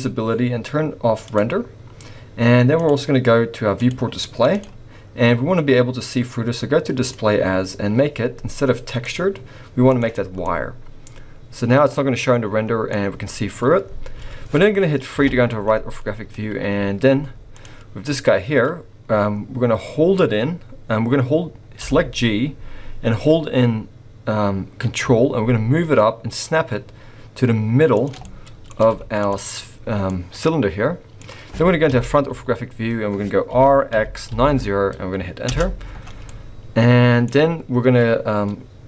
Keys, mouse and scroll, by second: 1.3 click, 2.8 click, 3.8 click, 3.9 click, 4.5 click, 4.9-5.4 scroll down 4, 8.4-9.1 scroll down 3, 9.1 click, 10.4 middle click, 15.1 KP_3, 17.1 z, 18.1-18.9 scroll down 3, 18.9-20.2 scroll up 1, 21.8 g, 28.2 middle click, 28.8 z, 30.1 middle click, 31.9 KP_1, 32.6-33.2 scroll up 1, 33.5 r, 36.3 middle click, 37.4-38.8 scroll up 1.